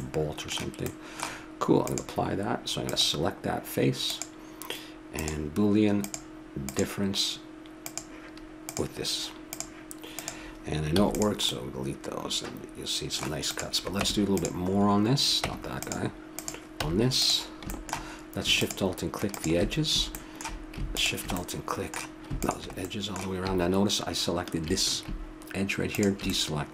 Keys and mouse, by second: 0.0 middle click, 1.8-4.2 drag, 5.1-11.9 drag, 10.9 x, 11.9 middle click, 14.0 Tab, 15.5 Tab, 16.4 click, 16.8 Tab, 17.7-20.0 drag, 20.2-24.2 drag, 24.5 middle click, 25.9 click.